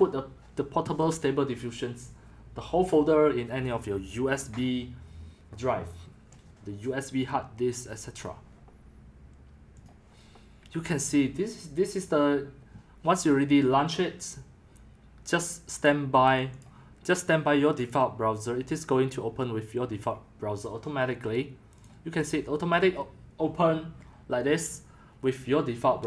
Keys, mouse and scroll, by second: 9.8 click, 16.6 click, 21.8 click.